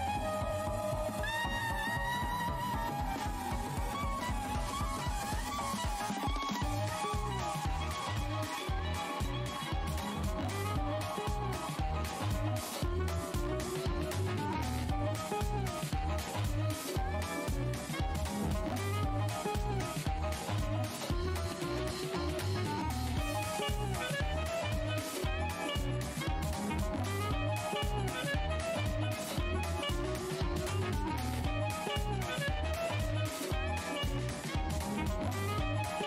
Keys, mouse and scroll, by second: 2.3 click, 3.0 Return, 4.5 f, 5.2 alt+scroll, 5.3 alt+scroll up 1, 6.4 space, 7.0 click, 10.6 shift+click, 11.4 alt+scroll up 1, 15.0 alt+click, 15.4-16.7 scroll down 1, 17.4-17.7 scroll up 1, 17.8 Delete, 18.5 alt+click, 19.1 space, 19.6 click, 20.2 ctrl+shift+h, 20.5 scroll up 1, 21.0 alt+w, 22.0 scroll down 1, 22.6 shift+click, 23.7 alt+w, 23.7 scroll up 1, 25.8 space, 29.7 shift+v, 31.6 scroll down 1, 31.7 space, 33.1 alt+click, 33.9 alt+scroll down 1, 34.6 alt+click, 34.7 alt+scroll down 1, 34.7 w, 35.6 click.